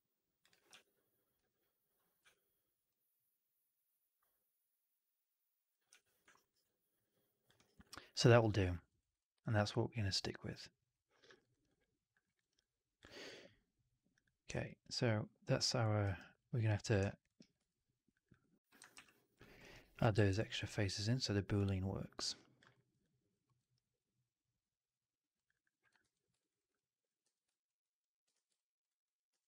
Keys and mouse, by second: 0.6 4, 1.2 w, 2.1 3, 5.1 click, 5.8 typing, 6.2 alt+right drag, 6.4 alt+right drag, 6.5-7.4 alt+drag, 7.4 right drag, 7.6 right click, 7.7 drag, 8.1 right drag, 8.3 right drag, 8.6 middle drag, 8.9 alt+right drag, 9.1-11.1 alt+drag, 11.2 alt+right drag, 11.4 alt+right drag, 11.5-12.0 alt+drag, 12.1 alt+middle drag, 12.3 alt+right drag, 12.5-12.9 alt+drag, 13.0 alt+middle drag, 14.0 click, 14.5 alt+right drag, 15.9 alt+right drag, 16.9 alt+middle drag, 17.1 alt+right drag, 17.5 2, 18.0 click, 18.9 ctrl+f, 19.5 alt+right click, 19.7 alt+click, 20.0 shift+x, 20.3 alt+click, 20.6 alt+click, 20.9 alt+click, 21.5-22.5 alt+drag, 22.6 middle click, 22.9 alt+click, 23.3 alt+middle click, 25.3 click, 25.4 click, 25.9 ctrl+f, 26.3 alt+right click, 26.4 alt+right click, 26.6 alt+click, 27.1 4, 27.5 alt+drag, 27.9 alt+middle drag, 28.2 shift+x, 28.5 alt+drag, 28.7 alt+right drag, 29.2 q.